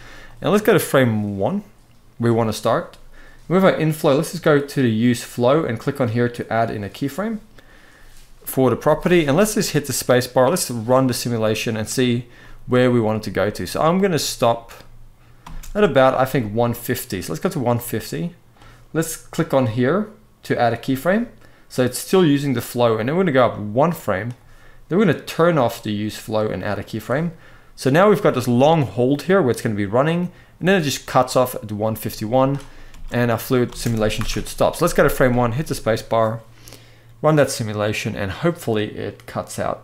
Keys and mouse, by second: 0.0-1.9 drag, 6.4 click, 8.6 space, 12.1-15.1 middle drag, 15.1 space, 17.2-18.3 drag, 20.3 click, 23.1 click, 25.3-32.3 drag, 32.7 space, 33.4 space, 34.1 shift+Left, 34.7 space.